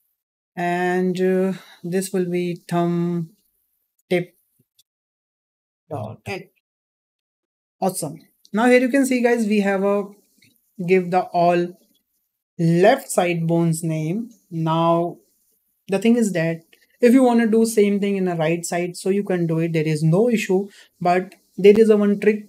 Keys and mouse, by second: 1.6 click, 2.5-7.7 drag, 8.1 click, 9.0 shift+middle click, 11.3 `.